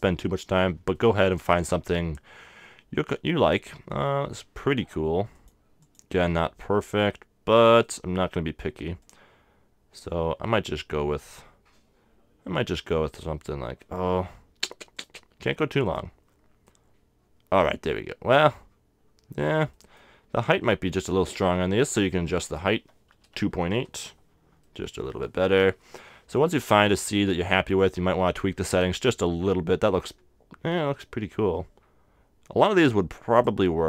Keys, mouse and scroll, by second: 1.1-2.7 middle drag, 5.3-7.7 drag, 6.9 right click, 7.1-8.7 middle drag, 9.0-10.8 drag, 10.0-12.0 middle drag, 13.4-14.9 middle drag, 14.9-17.6 drag, 16.7-18.7 middle drag, 19.1-21.6 middle drag, 22.4-24.2 drag, 24.6-27.8 middle drag, 27.8-29.7 drag, 28.7-30.3 middle drag, 33.3-33.8 drag.